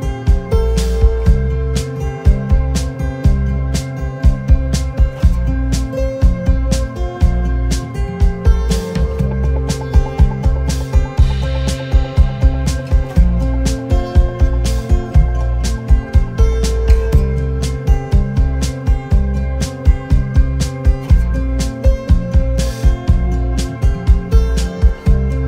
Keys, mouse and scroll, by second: 1.0 shift+click, 2.2 shift+click, 3.5 shift+click, 4.9 shift+click, 6.6 shift+click, 7.3 shift+click, 8.1 shift+click, 10.6 shift+click, 12.1 shift+click, 13.1 shift+click, 14.1 shift+click, 14.9 shift+click, 17.0 ctrl+z, 18.1 shift+click, 18.7 shift+click, 19.4 shift+click, 20.6 shift+click, 23.4 shift+click.